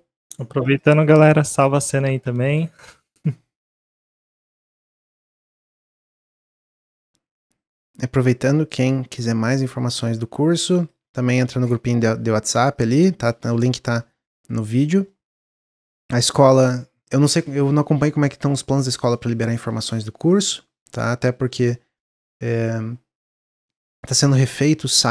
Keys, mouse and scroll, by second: 1.1 middle click, 1.3-2.0 scroll down 1, 2.0 Tab, 2.2 s, 4.2 s, 5.5 middle click, 5.7 scroll down 2, 6.0 shift+middle click, 6.4 s, 8.4-9.6 middle drag, 9.6-11.0 drag, 11.0 Tab, 12.7 click, 15.1-18.2 middle drag.